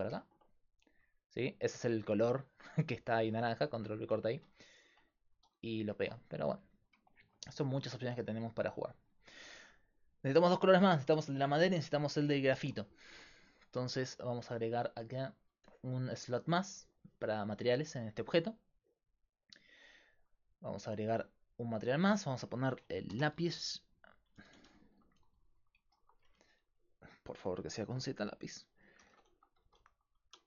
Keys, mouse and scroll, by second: 6.0-8.0 middle drag, 8.0-13.1 right drag, 13.1-15.3 middle drag, 15.3-18.1 drag, 18.3-20.0 right drag, 20.0-24.6 drag, 21.9 right click, 24.6 BackSpace, 24.7 BackSpace.